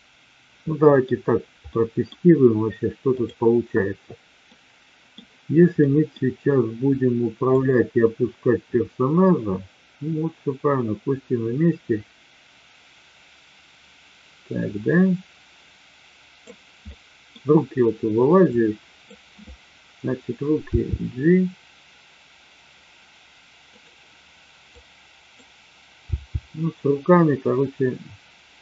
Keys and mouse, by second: 1.7 middle drag, 3.0 click, 4.4-5.2 middle drag, 5.8 middle drag, 7.6-16.6 drag, 16.8-17.2 middle drag, 18.4-19.2 drag, 20.7 g, 24.7-25.6 drag, 26.0 g.